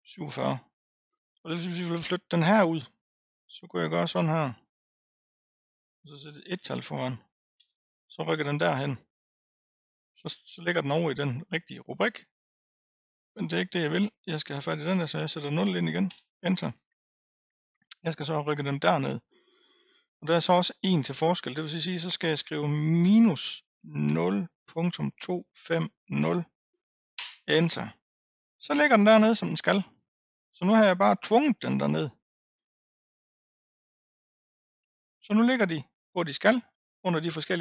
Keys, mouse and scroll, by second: 3.6-6.7 drag, 11.8 click, 12.9-16.0 drag, 16.7-21.4 right drag, 21.4-24.4 drag, 29.6 click, 32.2-32.9 scroll down 5, 32.9-34.3 scroll up 1, 34.3 click, 35.2 click, 36.1 click, 36.7-37.6 scroll down 4.